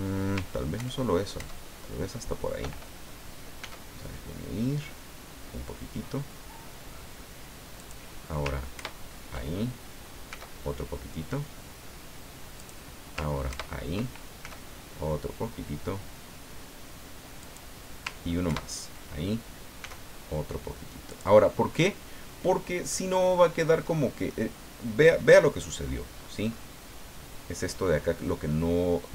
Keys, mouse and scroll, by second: 0.8 ctrl+KP_Add, 3.6 s, 7.8 click, 8.7 ctrl+KP_Add, 10.3 s, 12.6 click, 13.5 ctrl+KP_Add, 14.4 ctrl+s, 17.4 click, 18.5 ctrl+KP_Add, 19.8 s, 21.1 click, 21.4 scroll down 2, 21.7 middle click, 22.9-24.5 drag, 25.8-26.7 scroll up 3, 28.5 click.